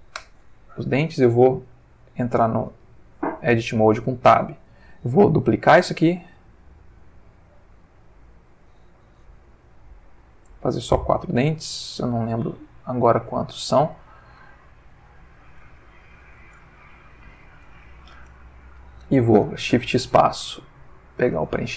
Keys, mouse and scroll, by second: 0.1 Return, 2.3 Tab, 3.1-3.9 drag, 5.2 shift+d, 7.4 click, 7.8 shift+d, 9.1 x, 10.4 click, 12.0 shift+d, 13.6 click, 15.3 g, 16.1 shift+click, 16.7 ctrl+shift+middle click, 17.6 ctrl+Tab, 19.4 shift+space, 20.8 click.